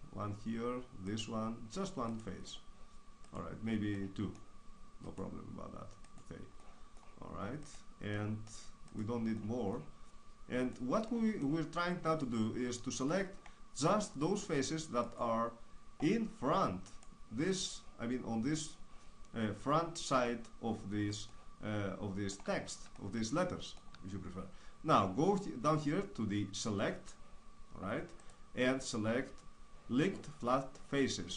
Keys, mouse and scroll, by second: 4.7-6.4 middle drag, 6.4 right click, 6.9-11.4 middle drag, 11.5 right click, 11.8-12.9 middle drag, 12.9-14.2 right drag, 14.2-16.4 middle drag, 16.4-20.8 right drag, 21.4-25.6 middle drag, 27.0 click.